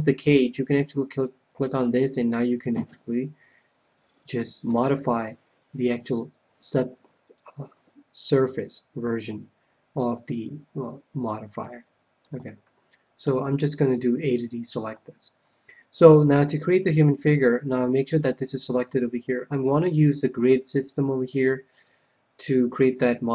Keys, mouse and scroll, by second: 1.0-2.7 drag, 2.2-3.9 middle drag, 12.2 KP_1, 13.2 a, 19.5-21.5 middle drag.